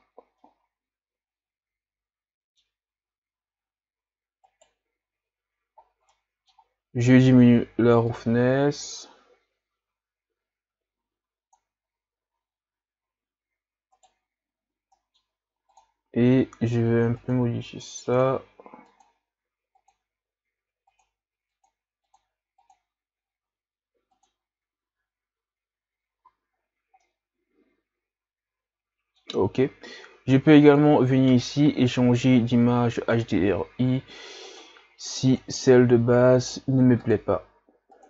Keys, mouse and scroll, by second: 0.4-2.8 middle drag, 2.8-4.5 scroll up 3, 4.5 right click, 8.1 right click, 8.3-12.3 drag, 12.3 a, 14.0 right click, 17.4 click, 18.1 click, 26.3 a, 26.5-27.0 scroll down 6, 27.0-33.4 middle drag, 33.4 click.